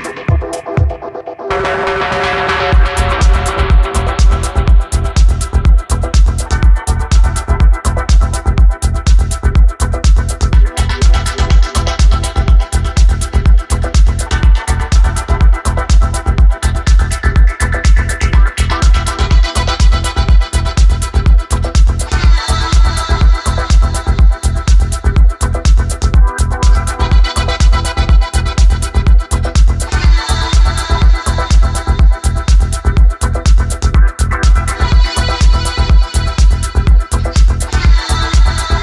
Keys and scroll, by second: 0.7 w, 1.0 f, 2.9 g, 4.1-5.9 typing, 10.1 Escape, 25.3-26.4 typing, 33.2-34.8 typing, 38.4 w.